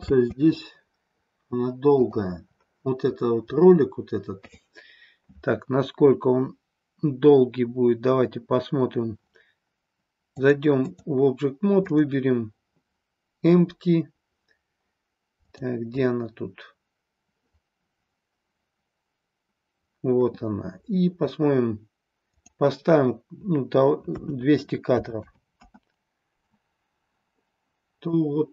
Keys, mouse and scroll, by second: 0.1 space, 1.9 click, 10.4-11.1 drag, 11.8 click, 15.4 click, 22.2-25.9 drag, 25.2 KP_0, 28.2-28.5 drag.